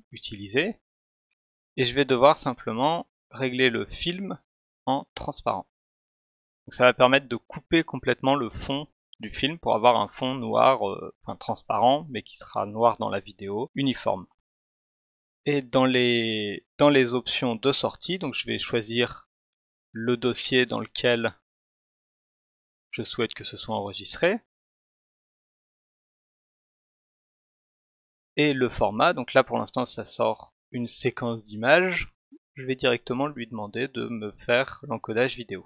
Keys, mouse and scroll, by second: 1.3 click, 5.0 click, 19.9 click, 29.9 click, 33.9-34.6 drag.